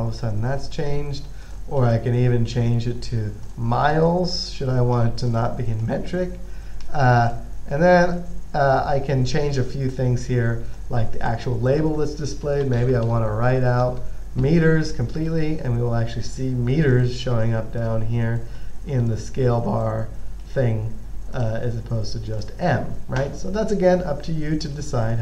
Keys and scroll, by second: 12.7-14.1 typing.